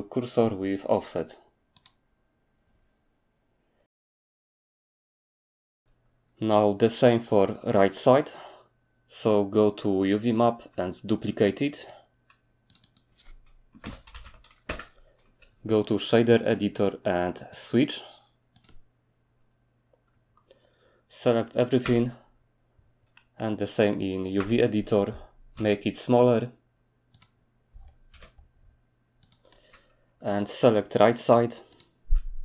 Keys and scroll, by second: 13.7-14.2 typing, 14.7 Return, 18.7 typing, 21.8 a, 24.4 a, 25.5 s, 28.1 g.